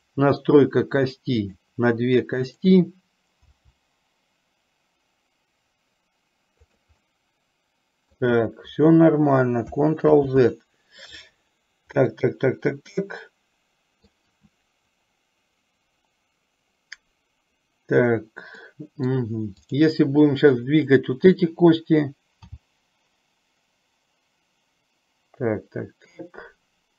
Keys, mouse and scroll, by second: 0.1 click, 1.2 click, 1.7 click, 2.6 click, 3.7 g, 7.2-8.5 middle drag, 10.2 ctrl+z, 12.5-14.3 middle drag, 18.7 middle click, 19.8 click, 22.6 g.